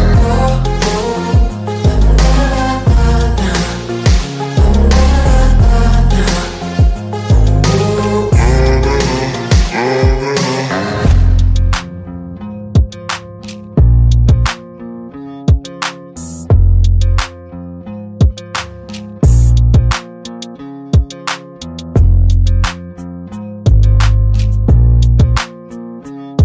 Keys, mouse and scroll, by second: 0.2 shift+click, 0.9 Escape, 2.2 click, 2.8 click, 4.2 shift+click, 5.0 Escape, 6.4 click, 8.3 shift+click, 9.2 Escape, 10.5 click, 12.4 shift+click, 13.3 Escape, 14.9 click, 16.4 right click, 16.9 click, 16.9 click, 20.2-20.9 drag, 22.8-23.2 drag.